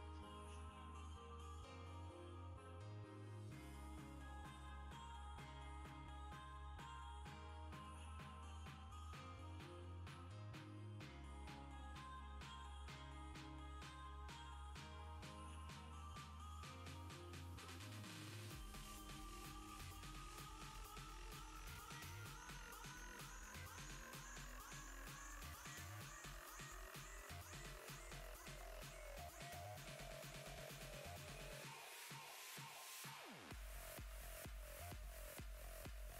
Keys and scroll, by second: 28.6 ctrl+z.